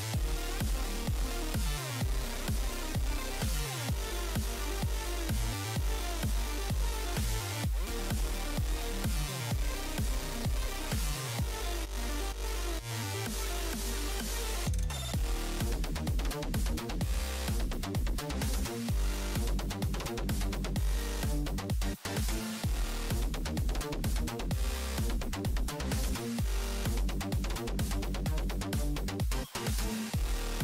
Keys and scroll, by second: 1.0 s, 10.3 s, 13.3 s, 18.7 s, 26.4 s.